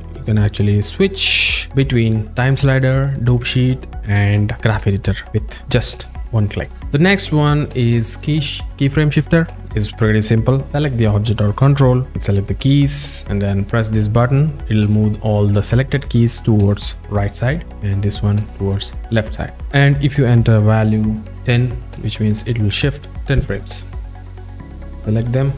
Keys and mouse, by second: 1.4 click, 5.8 click, 12.4 click, 12.5 click, 14.7 click, 20.0-21.4 drag, 24.8 drag.